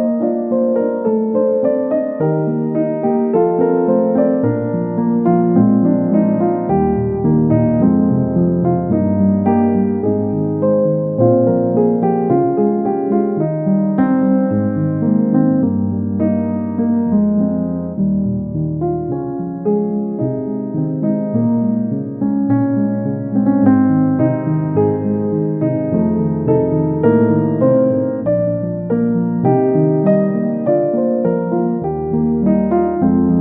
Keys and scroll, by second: 14.0 Delete, 22.0 ctrl+z, 23.5 ctrl+z.